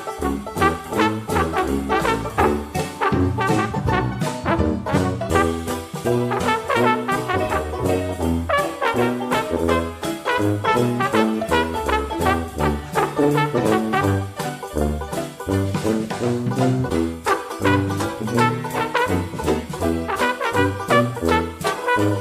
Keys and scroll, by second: 21.2 ctrl+d.